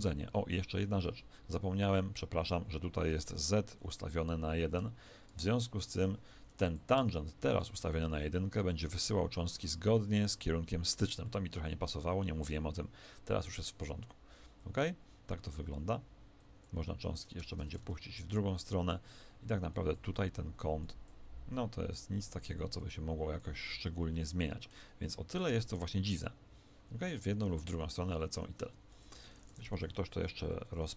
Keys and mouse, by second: 4.2 click, 8.0 alt+a, 11.2-14.6 middle drag, 14.6-18.2 drag, 17.4 Escape, 17.8 alt+a, 19.7-24.6 drag, 24.1-27.4 middle drag, 28.9 click.